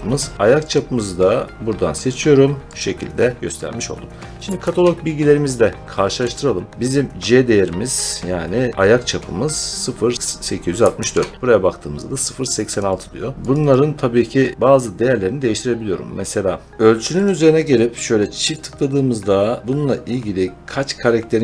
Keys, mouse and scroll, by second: 0.6 click, 2.0 click, 2.7 click, 4.5 alt+Tab, 6.9-7.5 scroll, 8.7-9.1 scroll, 10.9 alt+Tab, 11.3-12.6 scroll, 12.6 click, 12.6 scroll, 12.8 click, 13.4 click, 13.4 scroll, 13.6 click, 14.4 click, 14.5 click, 14.5 right click, 16.7 click, 17.1 click, 18.3 click, 18.5 click.